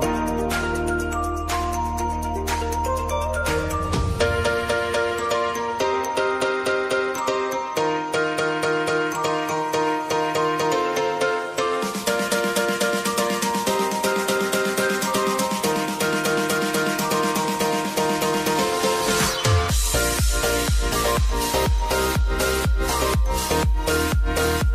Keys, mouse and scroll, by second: 0.7 s, 1.5-4.9 drag, 4.9 Right, 6.2 click, 6.9 s, 7.6 click, 8.5 r, 8.9 click, 9.6 u, 10.6-12.9 drag, 14.3 Return, 17.9 click, 18.7 Return, 19.8 click, 21.1 -, 22.0 Return, 23.4-24.7 drag.